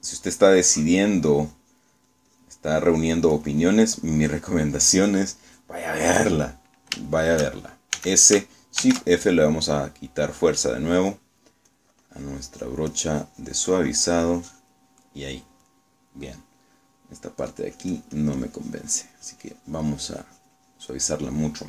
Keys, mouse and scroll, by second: 1.2-3.7 drag, 3.8-5.4 drag, 5.8 middle click, 8.1 shift+middle click, 9.0 s, 9.9 shift+f, 12.1 click, 12.8-16.0 drag, 16.2 middle click, 18.6-21.6 drag.